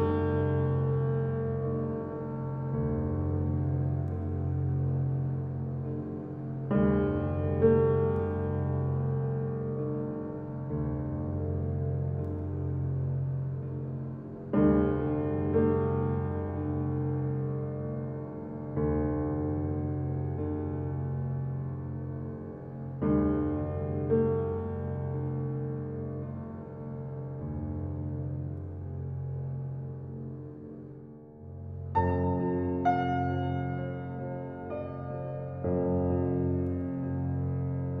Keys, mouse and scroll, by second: 3.1-4.6 middle drag, 4.6 g, 5.9-8.4 middle drag, 8.4 click, 8.8 Tab, 9.2 scroll up 2, 9.7 click, 10.1-11.1 middle drag, 11.1 shift+click, 11.5 middle click, 12.2 shift+click, 12.5 middle click, 13.3 shift+click, 14.6 ctrl+b, 21.0 alt+shift+click, 22.5 ctrl+z, 23.6 ctrl+b, 29.0 scroll up 1, 30.6 scroll down 2, 31.0 middle click, 31.8 s, 34.4 click, 34.6 s, 36.4-38.0 middle drag.